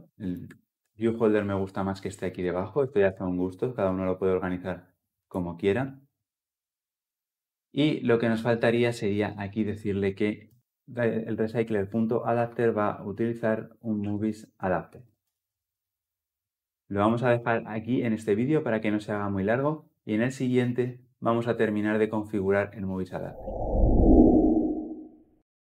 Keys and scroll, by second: 0.6 ctrl+x, 2.8 ctrl+x, 2.9 ctrl+v, 15.0 Return.